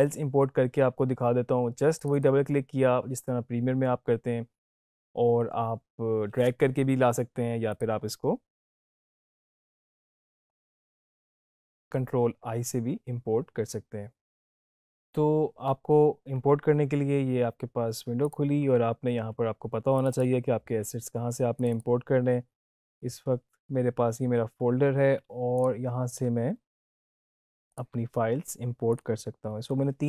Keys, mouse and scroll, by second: 7.6 click, 18.2 click, 23.9-25.5 scroll down 1, 25.5 click, 27.7 ctrl+click, 28.9 click.